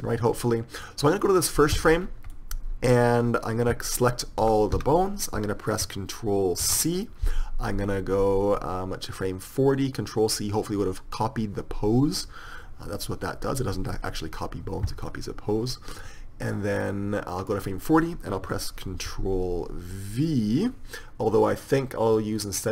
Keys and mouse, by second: 2.2 middle click, 4.7 a, 5.0 a, 8.8 ctrl+c, 8.8-9.9 drag.